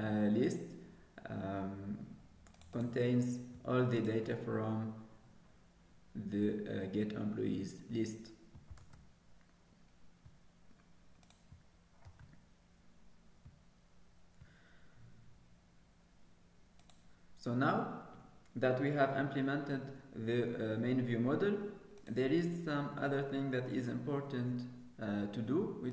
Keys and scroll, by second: 0.6 ctrl+s, 12.0 ctrl+s.